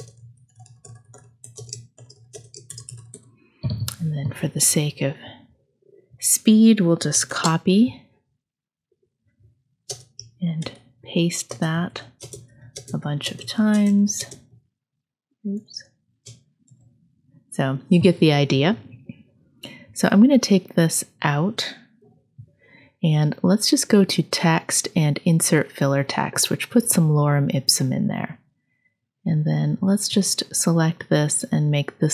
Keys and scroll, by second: 0.0 space, 1.5 space, 2.3 space, 7.1 super+c, 9.9 space, 10.6 super+v, 11.5-14.2 typing, 11.8 super+v, 12.5 super+v, 13.0 super+v, 13.6 super+v, 16.6 super+v, 22.0 Delete.